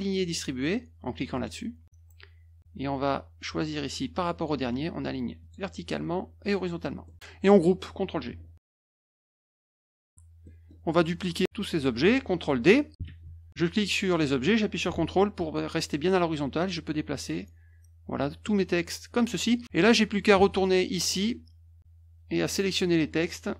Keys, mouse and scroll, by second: 1.3 click, 2.9-4.4 drag, 5.4 click, 6.4 click, 7.0 middle click, 8.5 ctrl+g, 8.9-10.0 drag, 10.1 -, 10.4 middle click, 11.3 click, 13.1 ctrl+d, 13.6-19.3 drag, 20.4 alt+Tab, 22.5 click.